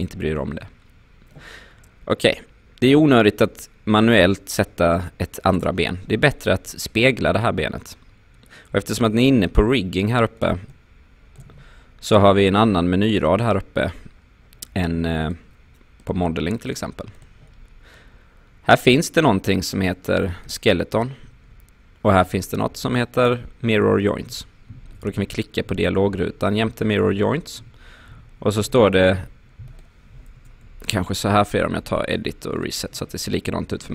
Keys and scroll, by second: 30.4 BackSpace.